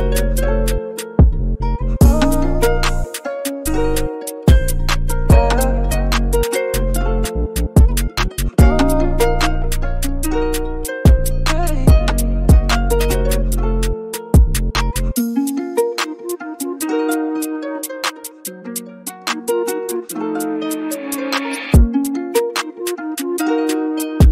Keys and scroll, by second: 4.3 ], 4.5 ], 10.7 super+g.